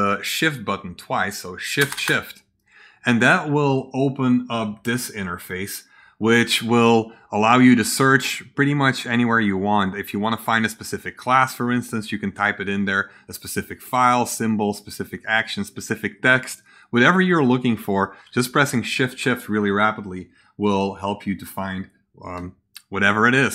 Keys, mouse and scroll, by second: 8.9 click, 10.6-11.4 drag, 12.5 click, 13.7 click, 14.2 click, 15.1 click, 16.3 click, 18.2 Escape.